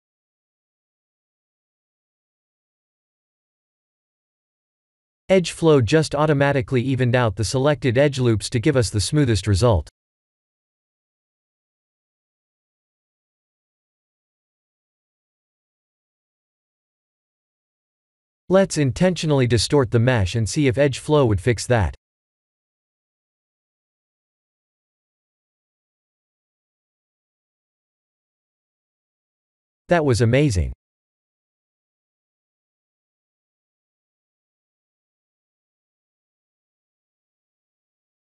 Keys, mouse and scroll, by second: 0.8 click, 4.2 middle click, 6.4-6.7 scroll up 3, 6.8 shift+middle click, 6.9 shift+middle click, 7.4-7.8 scroll up 3, 7.7 middle click, 7.8 middle click, 9.9 shift+middle click, 10.8-12.8 scroll up 3, 12.8 3, 13.4 click, 13.9 click, 15.2-16.2 scroll down 6, 16.2 Tab, 16.8 Tab, 17.5 2, 18.0 alt+click, 18.5 KP_1, 20.4 g, 22.5 Tab, 22.9 middle click, 24.4 middle click, 25.9 Tab, 26.2 middle click, 27.6 ctrl+e, 31.6 middle click, 32.4 middle click, 33.0 middle click, 33.2 Tab, 33.7 middle click, 35.3-35.8 scroll down 6, 35.8 Tab, 36.0 middle click, 36.3 middle click, 36.7 middle click, 37.1 middle click, 38.1 2.